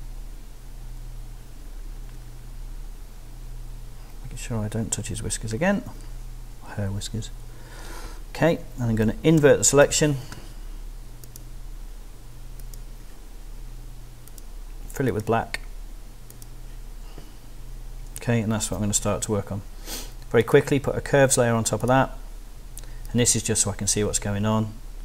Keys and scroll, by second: 9.4 shift+super+i, 18.6 super+d.